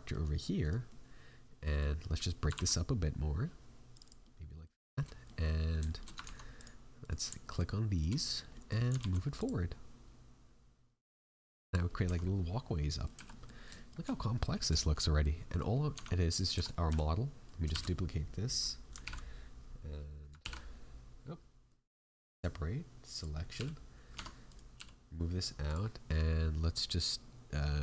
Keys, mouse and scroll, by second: 0.6 right click, 0.8 middle click, 2.5 ctrl+r, 4.2 middle click, 4.9 shift+middle click, 5.4 middle click, 5.8 shift+middle click, 6.2 ctrl+Tab, 7.0 right click, 7.5 shift+right click, 7.9 shift+right click, 8.1 middle click, 8.5 middle click, 8.9 alt+e, 11.8 scroll down 3, 12.0 Tab, 12.2 middle click, 13.1 a, 13.3 middle click, 13.7 shift+middle click, 14.1-14.4 scroll down 2, 14.4 middle click, 14.7 shift+middle click, 15.1 middle click, 15.5 right click, 15.9 Tab, 16.2 middle click, 16.5 a, 17.7 shift+d, 19.0 alt+p, 20.3 ctrl+p, 22.1 p, 24.1 Tab, 24.4 right click, 24.7 g.